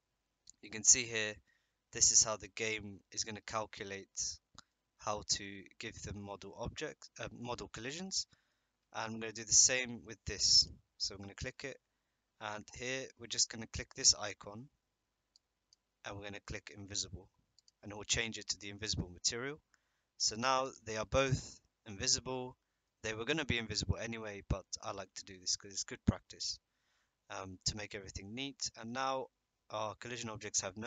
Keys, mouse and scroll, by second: 1.1-1.4 middle drag, 3.4-4.0 middle drag, 4.1-4.6 middle drag, 5.1-7.4 middle drag, 8.0-8.4 middle drag, 10.6-11.6 drag, 15.4 click, 20.3 middle click, 20.7 click, 21.0-22.8 middle drag, 27.9-28.8 middle drag, 29.8 middle drag.